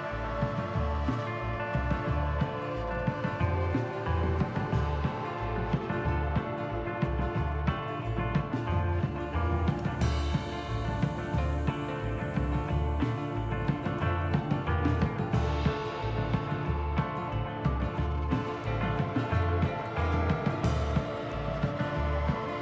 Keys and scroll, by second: 5.3 KP_Divide, 6.3 Tab.